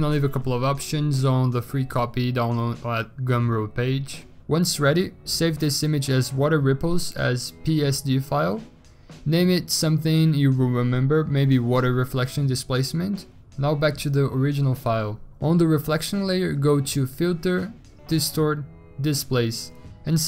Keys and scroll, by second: 2.0 ctrl+shift+s, 4.7-10.8 typing, 12.5-13.3 typing.